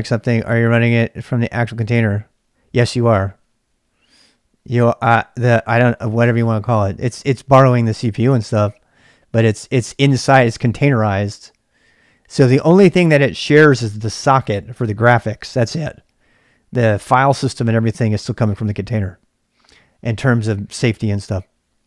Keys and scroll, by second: 0.0-21.8 typing.